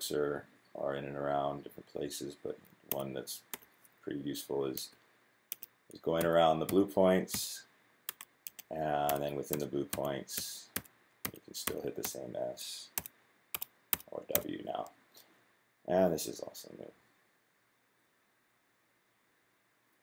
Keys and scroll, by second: 2.7-3.3 typing, 4.5-11.7 typing, 12.8-14.5 typing.